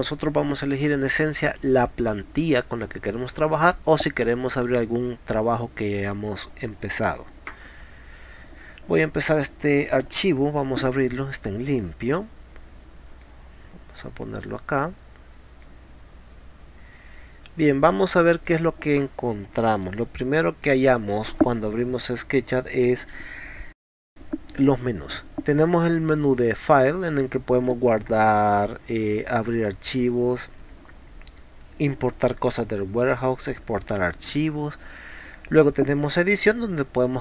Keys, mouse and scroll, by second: 7.1 click, 7.3-10.0 drag, 13.3 click, 15.7 click, 19.8 click, 20.6 click, 26.1 click.